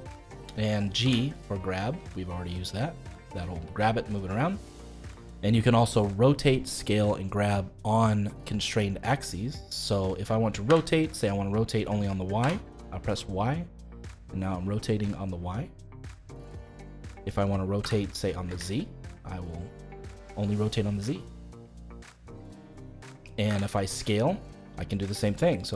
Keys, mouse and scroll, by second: 1.0 g, 10.6 r, 17.8 r, 23.4 s.